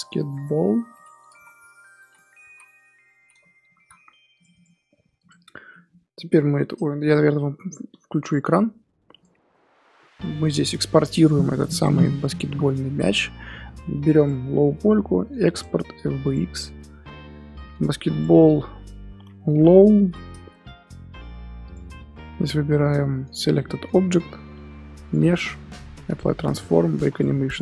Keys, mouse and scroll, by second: 5.3 click, 5.4 scroll up 1, 5.7-9.2 middle drag, 9.2 click, 11.0 click, 16.5-23.8 drag.